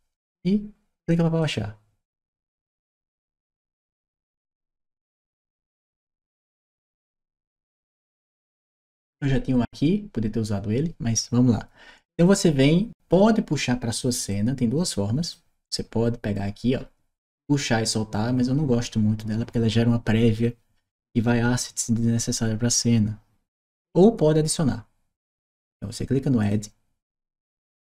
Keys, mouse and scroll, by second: 1.2 click, 14.1-15.1 drag, 16.5 middle click, 26.2 click.